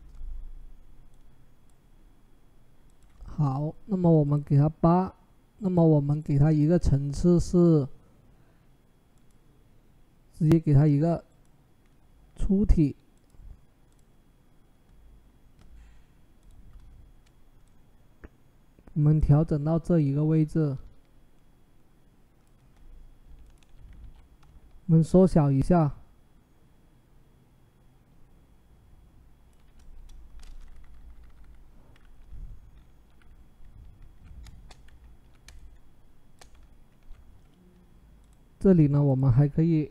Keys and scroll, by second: 23.8 ctrl+t, 29.7 Return, 30.6 Down, 30.8 Down, 30.9 Down, 31.0 Down, 31.1 Down.